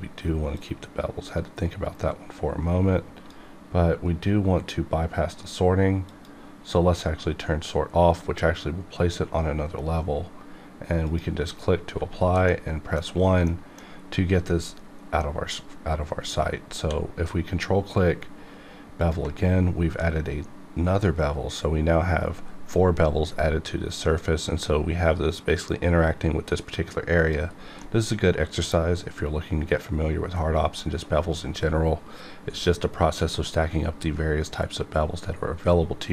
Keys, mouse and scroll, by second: 0.1 click, 0.5-5.6 drag, 6.1 click, 11.0 click, 11.2 click, 11.9 1, 12.5 middle click, 13.6 middle click, 14.5 scroll up 1, 15.2-16.8 middle drag, 16.8 q, 19.0 ctrl+click, 27.2 click, 27.5-27.8 scroll down 1, 27.8-33.1 middle drag.